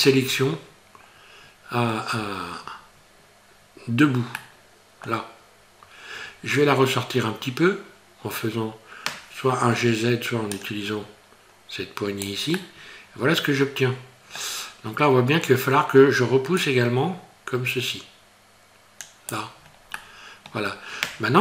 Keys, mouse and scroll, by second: 0.3-1.6 scroll up 2, 1.8 scroll down 4, 4.4 middle click, 10.6 click, 12.6 middle click, 16.6 click, 19.6-20.0 scroll down 3, 20.0 middle click, 21.1 scroll down 2.